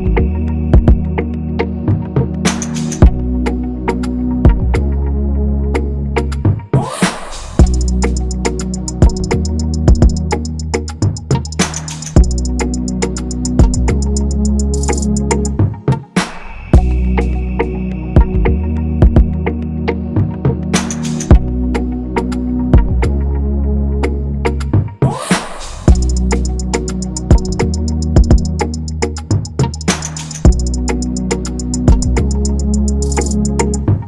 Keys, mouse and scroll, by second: 0.1 a, 2.7-3.6 scroll, 6.4 ctrl+-, 6.5 ctrl+-, 6.7 ctrl+-, 6.8 ctrl+-, 7.1 ctrl+-, 10.9 ctrl+=, 11.0 ctrl+=, 11.5 scroll, 14.9-15.4 scroll, 24.9 ctrl+z, 26.3 ctrl+=, 26.4 ctrl+=, 26.7 ctrl+scroll.